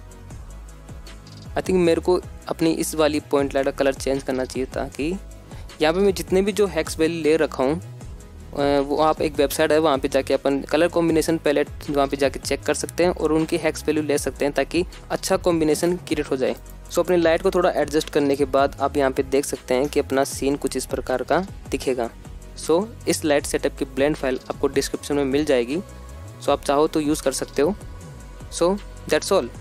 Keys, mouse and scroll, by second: 0.9-1.4 shift+middle drag, 14.7 g, 15.1 x, 16.3-29.6 drag.